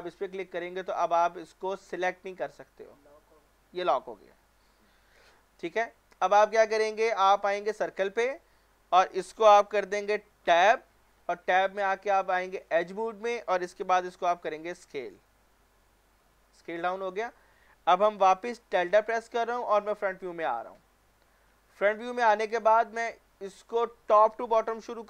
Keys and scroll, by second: 10.4 Tab, 14.0 s, 18.8-19.8 typing, 20.8 typing, 23.4 typing.